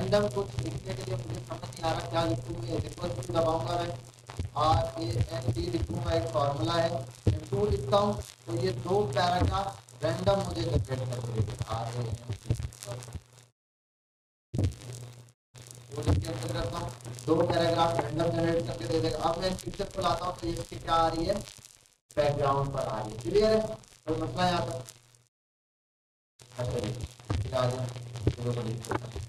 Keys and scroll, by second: 3.0 =, 7.2 2, 27.5 ctrl+a.